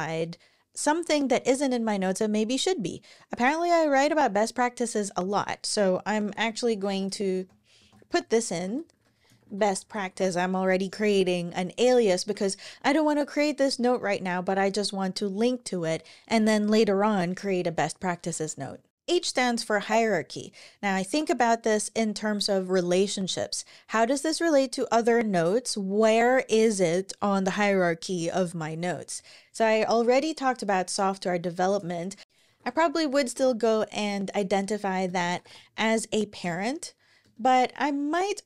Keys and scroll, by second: 6.1-10.4 typing, 11.6 Home, 11.9 Escape, 31.9-33.6 typing, 34.7-35.7 typing, 36.2 Return, 36.9 Return.